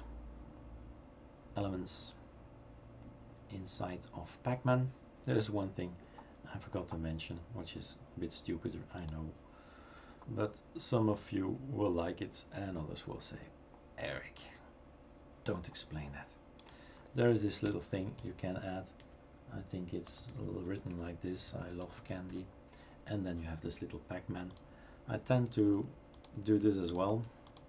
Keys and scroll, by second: 17.7 Return, 20.4-23.3 typing, 25.7 BackSpace, 26.4 BackSpace, 27.1 BackSpace.